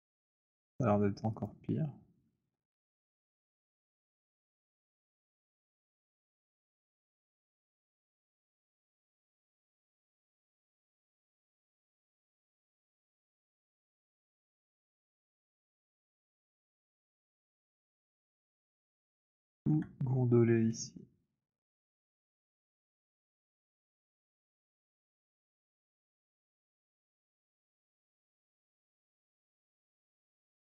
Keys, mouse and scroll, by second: 0.6 alt+click, 1.3 click, 2.2 z, 3.4 click, 5.6 right click, 6.7 click, 8.9 click, 8.9 shift+right click, 11.1 alt+click, 11.6 middle click, 11.6 w, 13.0 right click, 15.5 shift+click, 16.4 click, 18.8 alt+click, 19.7 alt+middle click, 21.6 click, 23.1 alt+click, 24.5 click, 25.3 z, 27.4 click, 29.6 right click.